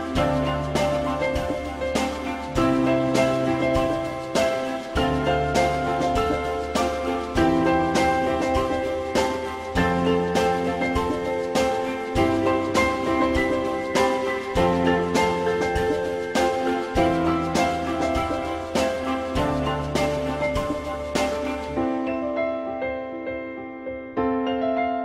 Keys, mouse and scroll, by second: 0.0 alt+middle click, 4.7 alt+middle click, 9.5 alt+middle click, 12.1 alt+middle click, 14.2 F4, 14.6 alt+middle click, 16.9 alt+middle click, 22.4 l, 22.9 z.